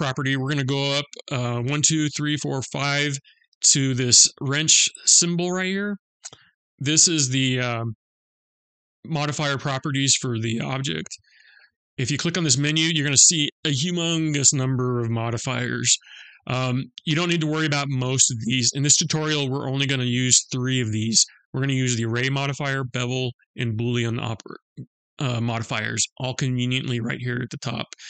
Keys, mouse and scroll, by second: 5.2 click.